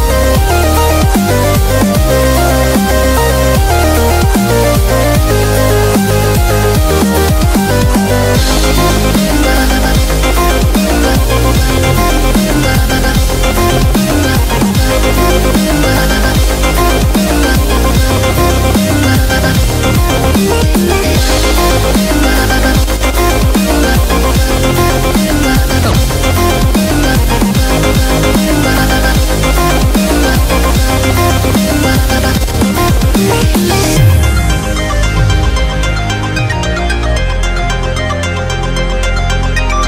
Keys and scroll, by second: 0.6 super+=, 0.7 super+=, 2.6-4.0 typing, 6.8 super+=, 8.2 super+-, 8.5 super+-, 8.7 super+-, 9.1 super+-, 9.2 v, 39.0 p.